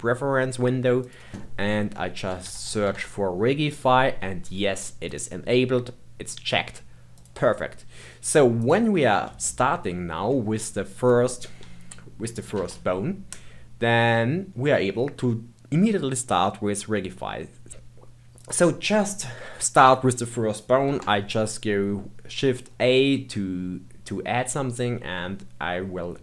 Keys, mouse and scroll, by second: 8.6 click, 9.4-10.4 shift+middle drag, 10.4 scroll down 2, 10.6-11.3 scroll up 1, 11.3-12.5 scroll up 1, 12.5 shift+a, 18.4 click, 20.8 shift+a.